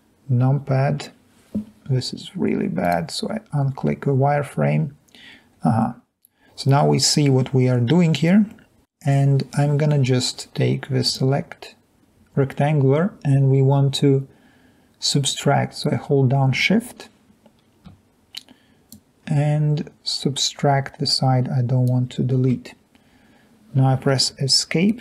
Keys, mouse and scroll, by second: 5.3 middle click, 5.3-5.7 scroll down 2, 5.7-6.6 scroll up 2, 6.0-6.6 middle drag, 19.6-21.8 drag, 24.3 Escape.